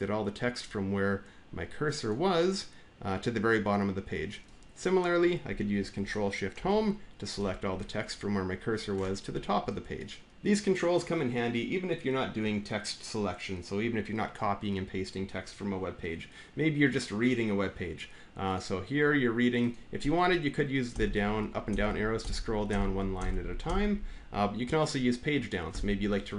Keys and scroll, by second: 6.4 ctrl+shift+Home, 20.7 scroll down 1, 21.5-22.1 scroll down 2, 22.5-23.5 scroll down 3, 25.5 Page_Down.